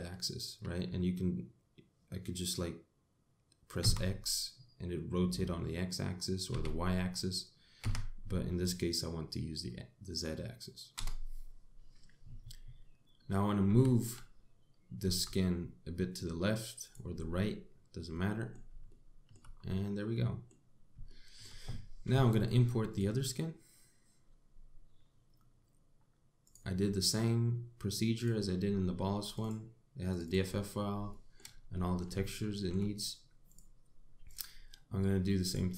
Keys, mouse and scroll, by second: 14.3 g, 17.8-18.2 scroll down 5, 18.8 middle click, 19.5 shift+middle click, 20.2-20.8 scroll up 3, 20.8 middle click, 21.7 shift+middle click, 23.5 click, 31.7 middle click, 32.4 middle click, 32.9 shift+middle click, 34.1 click, 34.9 click.